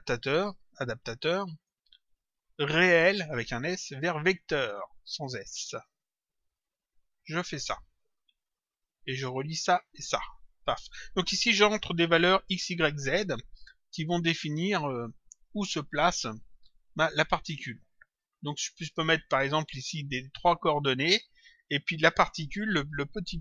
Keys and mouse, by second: 1.4 click, 3.1 click, 4.4 click, 6.0 click, 9.2 click, 22.9 click.